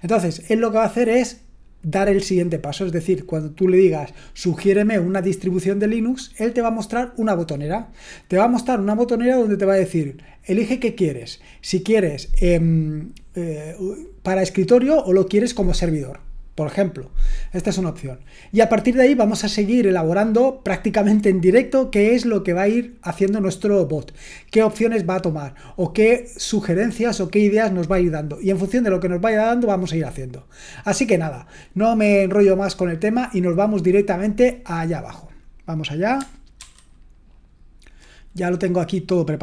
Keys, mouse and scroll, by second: 36.6 super+1.